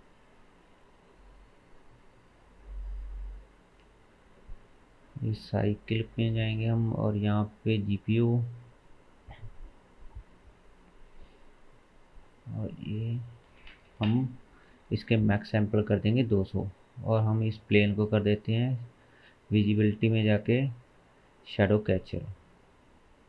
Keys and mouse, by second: 1.0-3.4 middle drag, 1.0 n, 3.4 click, 3.5-4.3 middle drag, 4.3-12.4 drag, 12.4-12.9 middle drag, 12.9-16.8 drag, 13.9 KP_0, 19.7-21.8 drag.